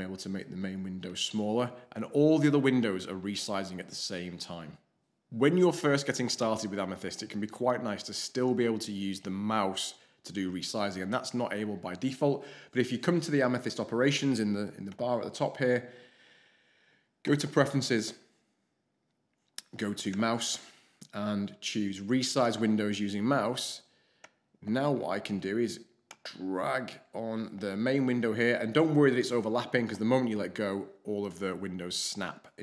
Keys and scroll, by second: 0.1 alt+shift+h, 1.0 alt+shift+h.